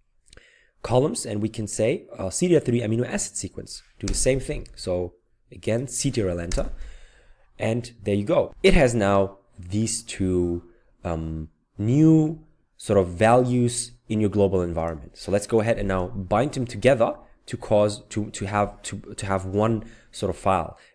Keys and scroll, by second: 4.0 Return, 6.5 ctrl+Return.